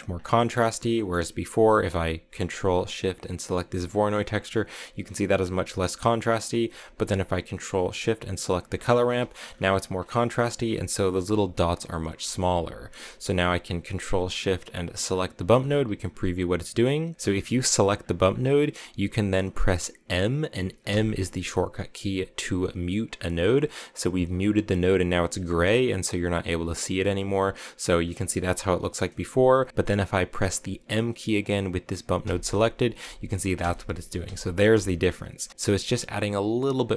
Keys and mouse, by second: 0.3 middle click, 0.9 middle click, 3.7 ctrl+shift+click, 5.8 middle click, 8.6 ctrl+shift+click, 9.1 shift+click, 12.1 middle click, 12.6 middle click, 15.0 ctrl+shift+click, 17.4 click, 18.2 click, 20.8 m, 29.5 click, 32.1-35.7 typing, 36.8 m.